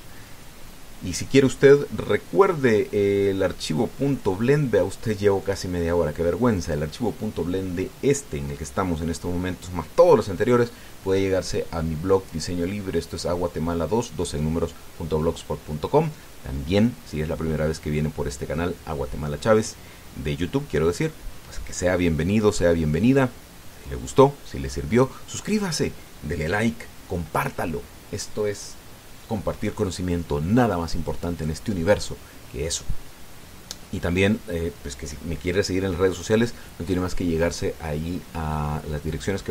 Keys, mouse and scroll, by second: 0.0 KP_Add, 0.6 KP_Enter, 4.9 click, 6.2 click, 7.4-7.7 scroll up 1.